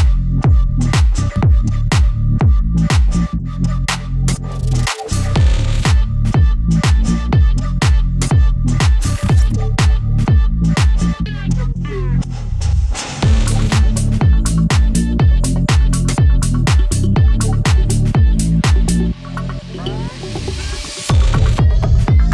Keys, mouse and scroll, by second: 5.4-13.4 drag, 17.9 click.